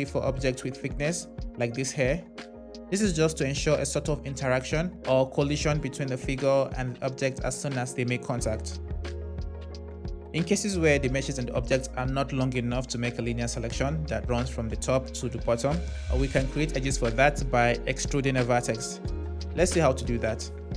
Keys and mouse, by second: 2.4 click.